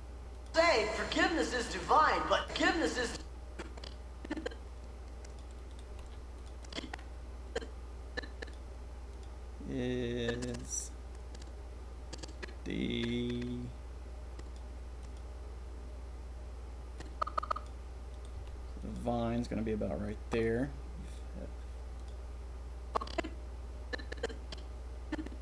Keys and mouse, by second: 0.4 click, 1.7 click, 2.3 click, 3.0 click, 3.5-5.1 drag, 5.3 click, 5.7 click, 5.8 g, 6.6-8.5 drag, 10.2-14.5 drag, 15.0 click, 16.9 click, 18.1 click, 18.3 g, 20.0 click, 22.9-23.5 drag.